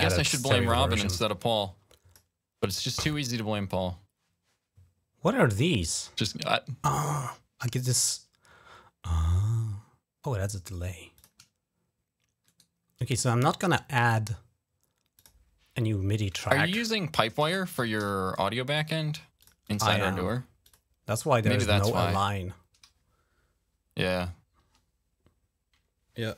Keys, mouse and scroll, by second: 1.0 click, 5.3 click, 10.9 click, 12.3 right click, 14.9 click, 15.1 click, 16.7-18.3 typing, 19.2 click, 20.4 click.